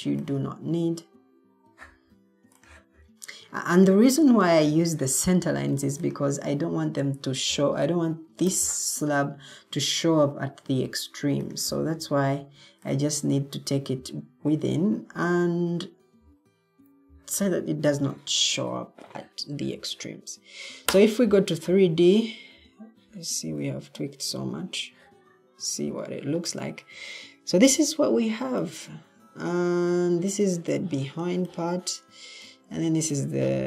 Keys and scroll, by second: 19.4 Escape, 28.6 o.